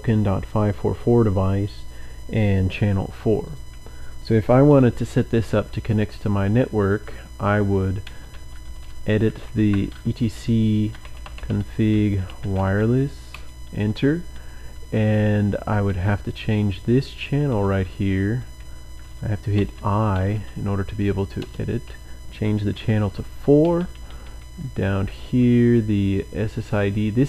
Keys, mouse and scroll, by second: 3.4 click, 7.8-13.2 typing, 14.7-17.2 typing, 16.1 Right, 19.5 typing, 20.6-25.9 typing, 24.7 Down.